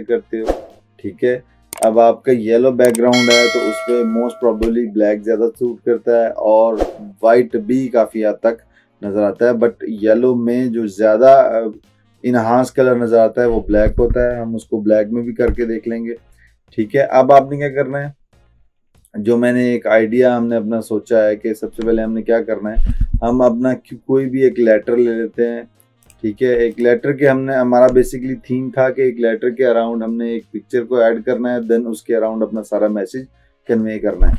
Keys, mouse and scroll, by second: 26.1 click.